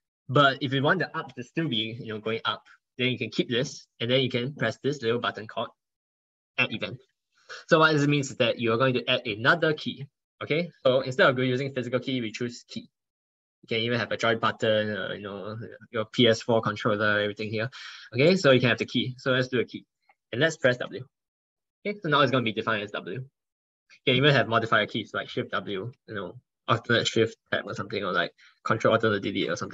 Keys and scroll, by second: 6.8 ctrl+1, 7.5 ctrl+1, 27.6 ctrl+shift+w.